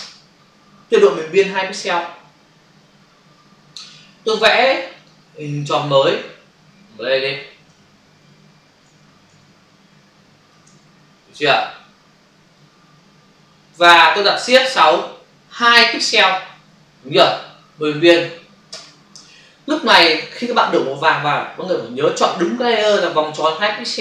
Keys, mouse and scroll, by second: 5.0 click, 6.3 shift+click, 7.1 shift+space, 12.4 click, 14.8 shift+F6, 15.8 2, 18.7 Return.